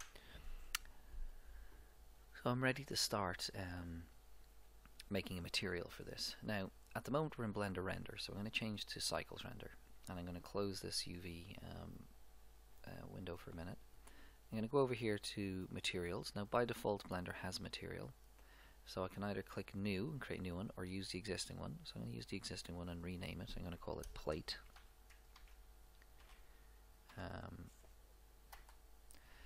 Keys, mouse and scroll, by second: 8.0-9.8 drag, 10.4-12.0 drag, 12.0-13.0 middle drag, 14.5-16.3 drag, 16.6-18.3 drag, 21.3-24.8 drag.